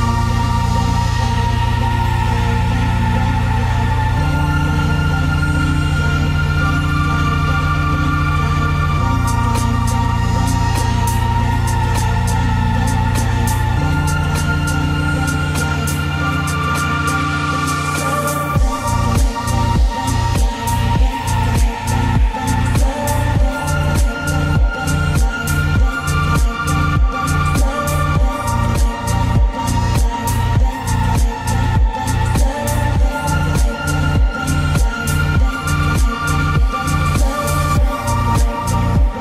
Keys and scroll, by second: 0.3 ctrl+space, 5.4 ctrl+space, 10.6 ctrl+z.